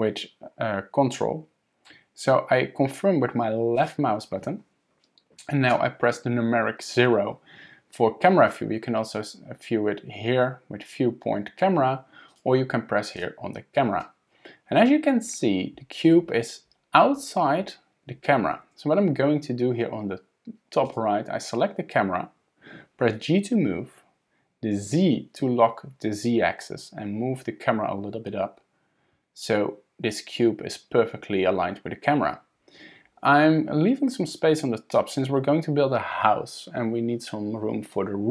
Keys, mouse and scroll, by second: 8.5 click, 12.3 click, 13.2 click, 20.9 click, 23.1 g.